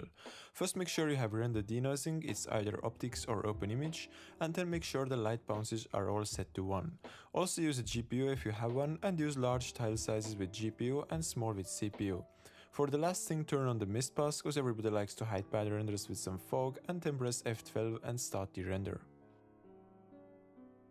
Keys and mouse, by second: 0.3 click, 0.9 click, 1.2-1.9 drag, 4.3 click, 5.3 click, 6.3 click, 6.6 click, 6.7 click, 6.8-9.0 drag, 9.9 click, 11.0 click, 11.6 click, 15.9 click, 17.6 super+s, 18.0-19.3 drag.